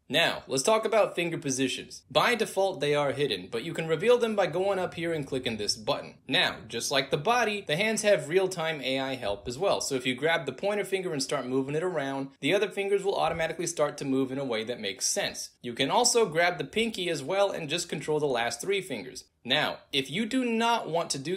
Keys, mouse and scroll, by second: 0.0 alt+right click, 0.0-0.5 alt+drag, 4.0 alt+click, 5.2 click, 6.0-6.6 alt+drag, 6.7 alt+right drag, 7.1 alt+middle drag, 7.8 click, 8.5-10.9 drag, 11.3-12.5 alt+drag, 12.8-13.2 alt+drag, 13.5-14.3 alt+drag, 14.6-16.2 alt+drag, 16.2 ctrl+z, 16.3 alt+drag, 16.7 alt+click, 17.0 alt+click, 17.6-20.7 alt+drag, 21.0 ctrl+z.